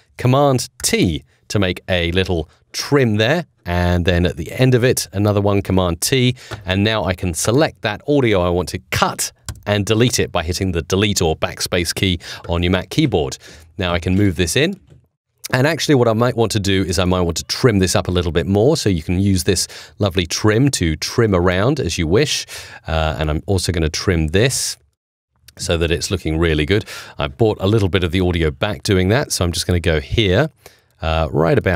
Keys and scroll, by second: 0.7 super+t, 5.5 super+t, 9.4 BackSpace.